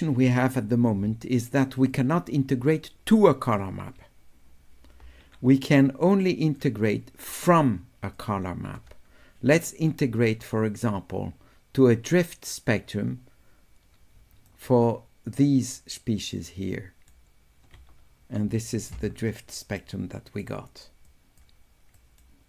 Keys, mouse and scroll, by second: 2.0 click, 5.9 click, 7.3 click, 14.3 d, 14.5 middle click, 15.3-17.1 drag, 18.6 click, 19.8 right click, 21.1 click, 22.0 right click.